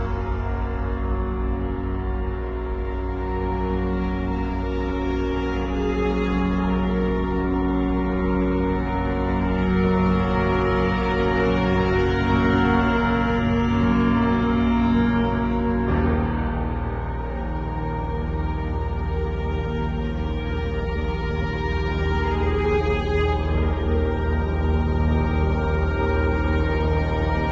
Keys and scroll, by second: 0.0-0.5 typing, 12.4 v, 22.5 b, 24.0 x.